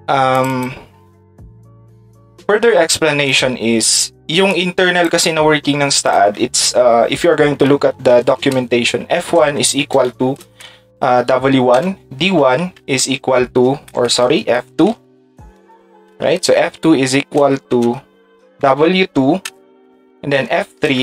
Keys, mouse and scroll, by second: 0.3 click, 0.5 click, 1.4 click, 7.9-10.4 typing, 12.4 d, 13.0 space, 14.8 f, 16.3 f, 17.4 space, 17.8 space, 18.6 d, 20.3 f, 20.8 space.